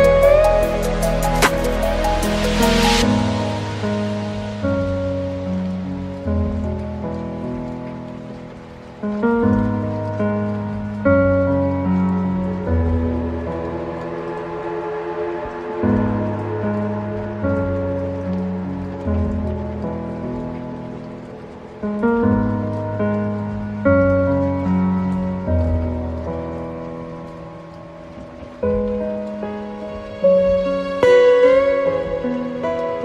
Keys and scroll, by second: 6.8 alt+BackSpace, 7.5 ctrl+d, 10.8 alt+BackSpace, 11.2 ctrl+d, 27.8 ctrl+t, 29.9 ctrl+space.